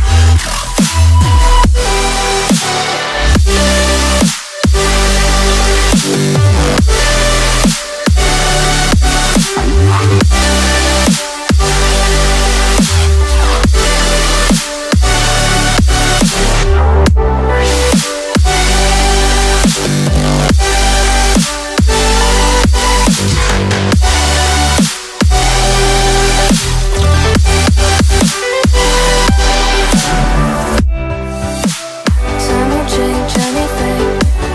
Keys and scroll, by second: 2.7 x, 3.0 x, 6.3 ctrl+z, 6.5 ctrl+z, 6.8 ctrl+z, 12.6 ctrl+z, 12.6 ctrl+z, 14.3 x, 20.6 ctrl+z, 21.3 x, 21.9 ctrl+z, 22.3 ctrl+z, 25.4 x, 26.4 ctrl+z, 32.4 ctrl+z, 33.9 ctrl+z.